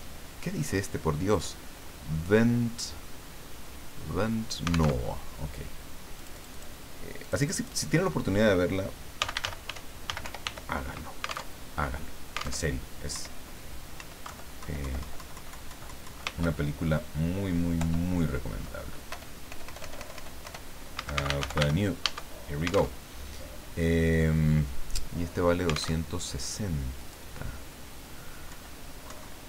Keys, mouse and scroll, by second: 4.9 alt+Tab, 6.1 click, 7.2 click, 8.9-10.9 typing, 11.5 alt+Tab, 12.6 alt+Tab, 13.1 Up, 14.0 Up, 14.2 Left, 16.4 ctrl+Home, 17.8 ctrl+End, 19.1 ctrl+BackSpace, 20.7-22.1 typing, 22.9 alt+Tab, 25.9 alt+Tab, 27.0 click, 28.5 Left, 29.0 Right.